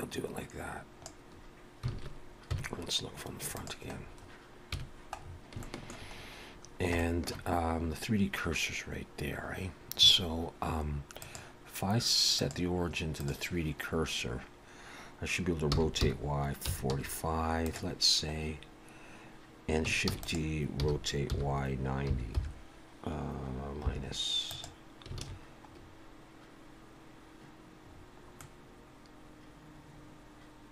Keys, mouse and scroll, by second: 1.9 alt+a, 3.6 click, 3.6 KP_1, 4.0-4.6 scroll down 4, 4.6 KP_1, 5.2-5.6 scroll down 2, 5.6 shift+middle click, 6.1 scroll up 1, 6.6 scroll down 1, 7.0 shift+middle click, 11.2 click, 15.7 r, 20.1 shift+d, 20.8 r, 25.2 alt+a, 25.7-26.4 scroll up 3, 27.8-28.4 scroll down 3, 28.4 middle click.